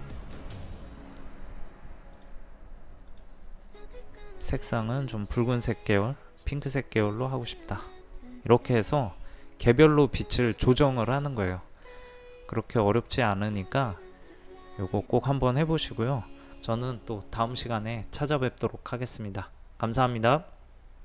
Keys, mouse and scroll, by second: 0.0 click.